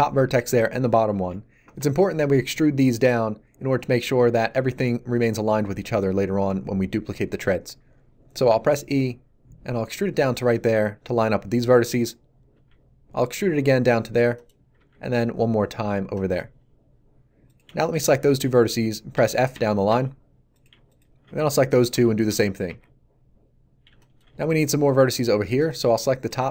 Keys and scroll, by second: 8.5 e, 12.5 e, 19.1 f.